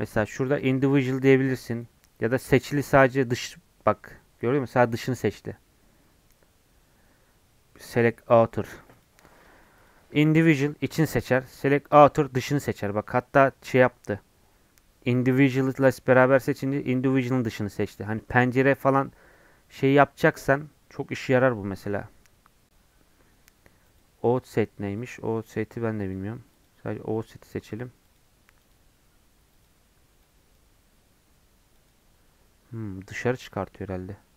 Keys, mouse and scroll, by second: 8.9-14.3 drag, 19.5-22.9 scroll up 3, 23.8-33.1 drag, 33.1 scroll down 1, 33.2-34.3 middle drag.